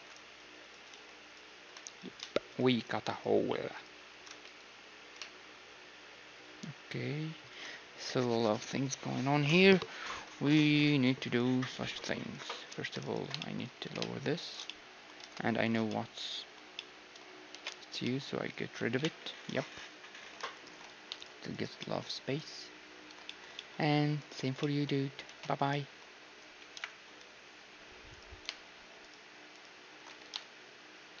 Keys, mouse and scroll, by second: 0.9 x, 1.9-7.4 right drag, 4.8 s, 12.3-15.3 drag, 13.4-20.6 middle drag, 13.8 g, 15.3 ctrl+Tab, 17.5 ctrl+x, 19.0 KP_1, 20.6-26.1 right drag, 21.8-28.1 middle drag, 25.3 ctrl+x, 26.8 KP_1, 28.1-31.2 right drag.